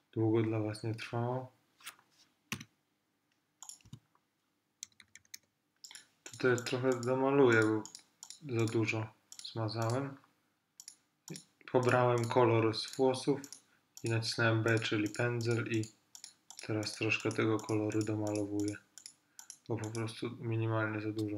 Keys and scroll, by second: 2.6 i, 3.9 b, 4.9 [.